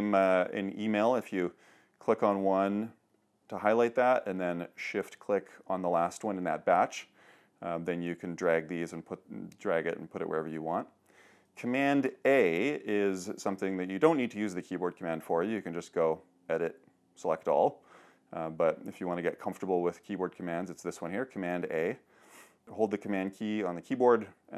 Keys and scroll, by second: 12.0 super+h.